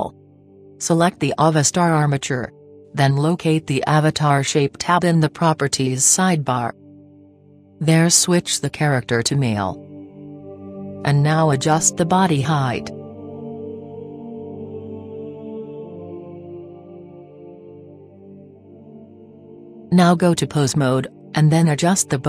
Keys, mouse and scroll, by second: 2.2-4.0 right drag, 4.0-5.8 drag, 8.0-9.6 drag, 10.8 click, 12.6-14.4 drag.